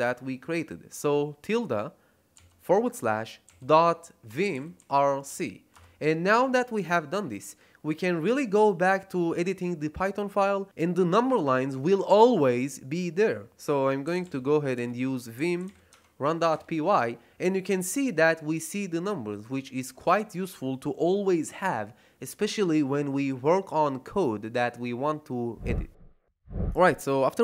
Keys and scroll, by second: 2.3 /, 3.4-5.7 typing, 13.7-16.1 typing, 16.4 Return.